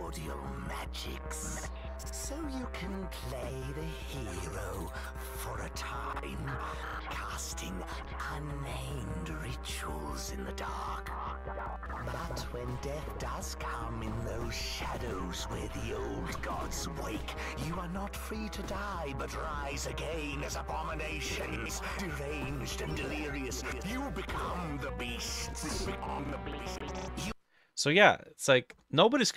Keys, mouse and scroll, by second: 27.8 Escape, 27.8-29.3 drag.